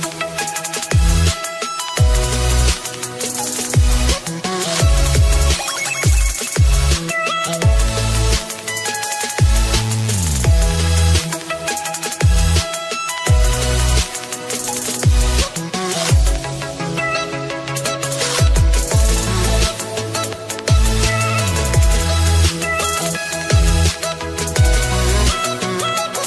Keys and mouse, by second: 1.5 click, 3.3 click, 9.1 click, 11.6 click, 12.6 click, 12.9 shift+click, 16.8 shift+Page_Down, 16.8 shift+click, 17.9 shift+click, 18.3 shift+Page_Down, 18.3 click, 19.2 shift+Page_Down, 19.2 click, 19.7 click, 24.1 click.